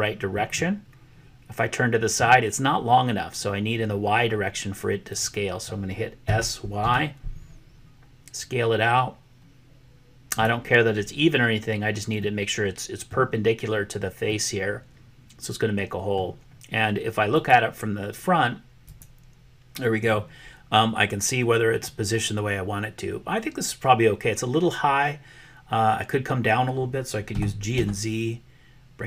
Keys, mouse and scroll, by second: 0.5-2.2 middle drag, 6.3 s, 12.1-13.1 middle drag, 14.4-16.3 middle drag, 17.2 click, 18.8 click, 27.2 g.